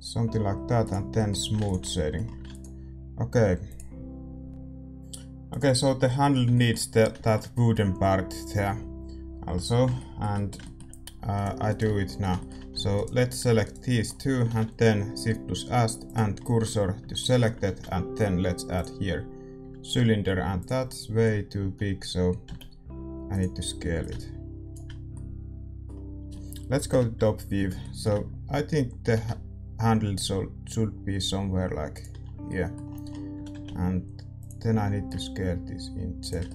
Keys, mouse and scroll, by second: 0.8-4.5 drag, 1.1-11.6 middle drag, 1.4 a, 1.8 ctrl+s, 11.6-16.1 right drag, 11.8 Tab, 12.0-16.1 middle drag, 12.7 a, 16.1 shift+s, 16.4 middle click, 16.9 a, 18.7 shift+a, 19.6 s, 21.5 s, 23.9-26.8 drag, 24.9-26.8 middle drag, 26.8 KP_7, 27.7-30.0 middle drag, 29.0 g, 32.2-35.0 middle drag, 33.3 s, 35.0-36.5 drag, 36.4-36.5 middle drag.